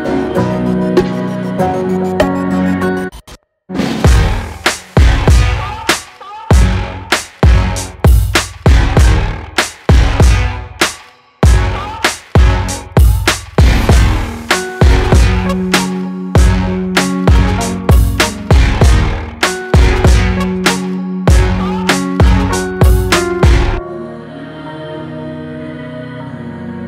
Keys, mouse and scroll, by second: 1.3 click, 3.7-8.1 drag, 8.2 click, 8.5 right click, 9.3 click, 10.1 shift+click, 10.8 Down, 14.6-17.8 drag, 18.4-21.7 drag, 23.1-26.7 typing, 23.4 click, 24.9 click, 26.2 click.